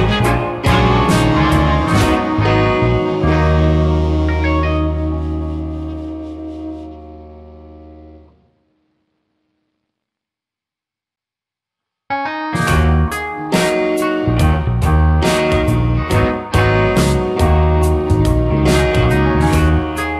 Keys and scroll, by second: 3.6 space, 5.4 space, 13.6 space, 15.1 space, 16.4 space.